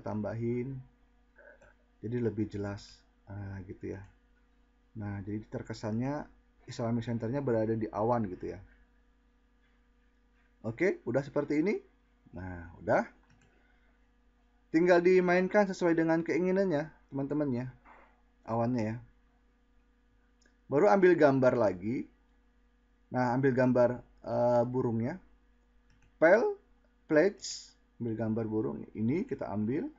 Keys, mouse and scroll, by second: 4.6 click.